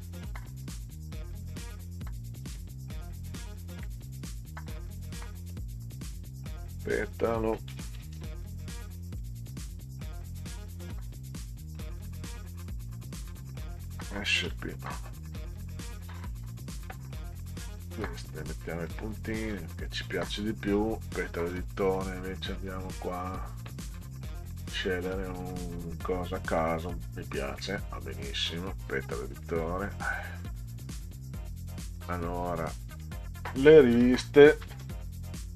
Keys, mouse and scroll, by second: 1.6 click, 3.8 Caps_Lock, 4.7 p, 5.4 e, 6.2 a, 7.5-11.2 typing, 11.4 click, 13.2 s, 13.8 p, 14.4 a, 17.7 ., 18.6 click, 18.9 ., 19.4 click, 19.5 ., 20.7-21.8 drag, 23.0 click, 23.4-24.9 scroll down 10, 25.2 click, 27.8 click, 29.2 click, 29.4 click, 29.6 click, 29.8 click, 30.1 click, 30.4 click, 31.8 click, 34.4-35.5 typing.